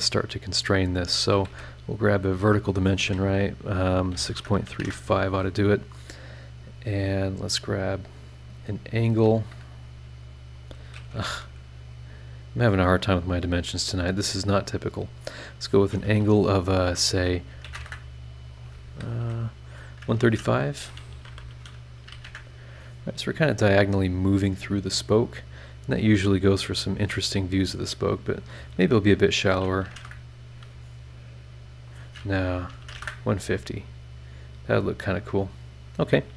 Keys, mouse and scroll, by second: 1.1 shift+click, 1.5 shift+v, 2.3 click, 4.1 KP_6, 4.3 KP_Decimal, 4.5 KP_3, 4.7 KP_5, 4.8 KP_Enter, 8.1 click, 9.7 click, 10.6 click, 11.2 a, 11.9 click, 13.0 click, 13.7 click, 15.1 click, 17.4 KP_1, 17.6 KP_3, 17.7 KP_0, 17.8 KP_Enter, 19.2 Escape, 19.5 click, 20.3-22.1 typing, 22.2 KP_Enter, 23.9-25.4 drag, 28.3 click, 29.5 KP_1, 29.8 KP_2, 29.9 KP_0, 30.0 KP_Enter, 31.7 click, 32.7 KP_1, 32.8 KP_5, 32.9 KP_0, 33.0 KP_Enter, 34.5-35.9 drag.